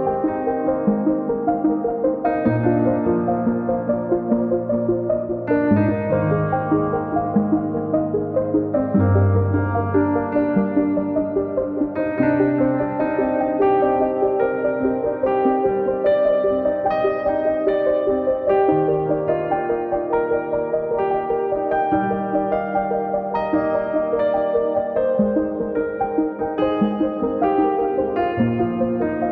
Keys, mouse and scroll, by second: 0.8 click, 1.8-2.9 drag, 2.9 scroll up 10, 7.2 click, 7.5-8.2 scroll down 4, 8.2-9.3 drag, 12.9 scroll down 1, 13.1 click, 14.6 scroll up 1, 14.8 click, 16.1 click, 17.1 scroll up 3, 17.3 scroll down 2, 17.4 click, 18.5 click, 19.9 scroll up 3, 20.1 click, 20.8 scroll down 4, 21.0 KP_9, 21.2-21.8 scroll up 3, 21.5 click, 21.9 click, 23.3 click, 25.2 click, 27.8 KP_1, 28.0 scroll down 9, 28.3-28.8 scroll up 9.